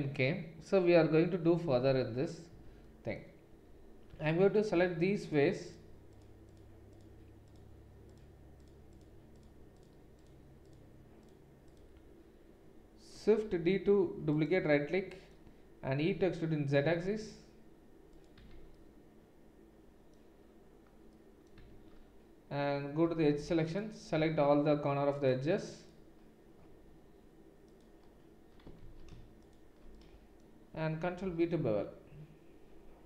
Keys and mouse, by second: 2.5 Tab, 4.1 3, 4.5 click, 4.5 middle click, 5.2 shift+click, 5.2 shift+middle click, 6.5 shift+click, 6.5 shift+middle click, 7.4-9.9 shift+drag, 7.4-9.9 shift+middle drag, 10.2-13.1 shift+drag, 10.2-13.1 shift+middle drag, 13.1 shift+d, 14.4-25.2 middle drag, 16.0 e, 18.5 Tab, 21.5 Tab, 23.4 2, 23.7 alt+click, 25.2 alt+shift+click, 25.9-27.7 alt+shift+middle drag, 27.7 alt+shift+click, 28.0-29.4 alt+shift+middle drag, 28.8 ctrl+z, 29.4 click, 29.8-33.0 middle drag, 31.4 ctrl+b.